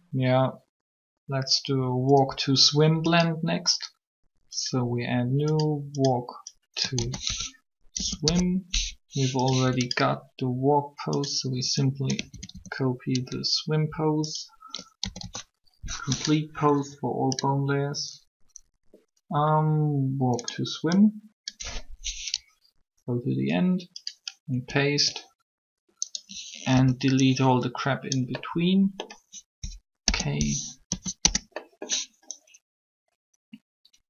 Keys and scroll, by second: 7.0-8.7 typing, 12.3 a, 12.3 a, 15.0 shift+a, 15.1 shift+a, 26.7 b, 29.7 k, 30.7 Delete, 30.9 Return.